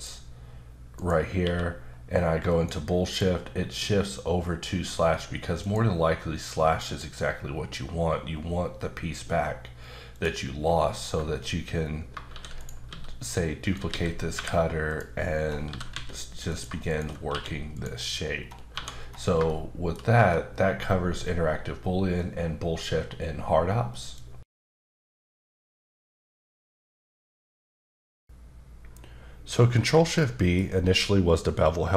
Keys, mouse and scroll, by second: 0.5-1.0 scroll down 1, 1.0 click, 1.4 q, 2.5 click, 3.1 click, 5.6 click, 6.9 click, 7.5 scroll up 1, 10.1 click, 10.6-11.1 scroll down 2, 12.3 shift+d, 12.6 right click, 12.9 s, 13.6 click, 13.9-14.3 typing, 14.9 click, 15.3-15.7 scroll up 3, 15.7 typing, 16.5 click, 16.9 click, 17.3 q, 17.7 click, 18.4-19.3 scroll down 4, 18.7 1, 19.5 shift+middle click, 20.1-22.2 scroll up 1, 30.6-31.6 scroll up 2, 31.6 middle click.